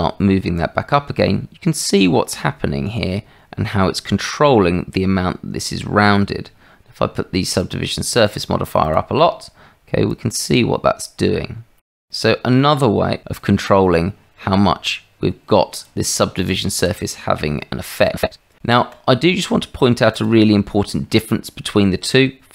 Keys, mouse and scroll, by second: 7.5 click, 8.1 click, 10.1-15.9 drag, 18.5 Tab, 20.1 click, 22.1-22.5 middle drag.